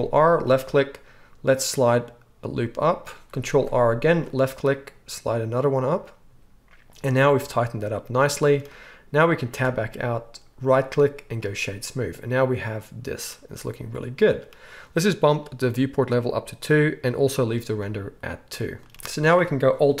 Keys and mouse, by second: 3.4 ctrl+r, 9.5 Tab, 10.6-12.5 drag, 12.5-16.5 right drag, 16.5-19.0 middle drag, 18.9 KP_1.